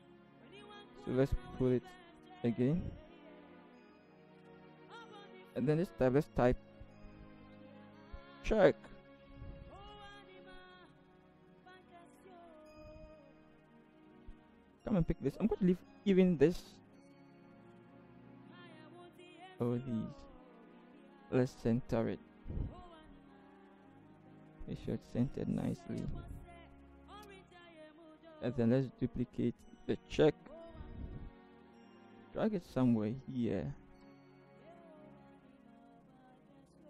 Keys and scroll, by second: 0.3 ctrl+c, 0.6 ctrl+v, 0.9 ctrl+j, 7.7-8.7 typing, 9.8 Return, 17.8 ctrl+c, 21.0 ctrl+t, 22.4 shift+Right, 22.9 Right, 23.3 Right, 24.1-24.4 Right, 24.4 Left, 25.1 Left, 25.2 Left, 25.4 Up, 26.0 Up, 31.1 ctrl+j.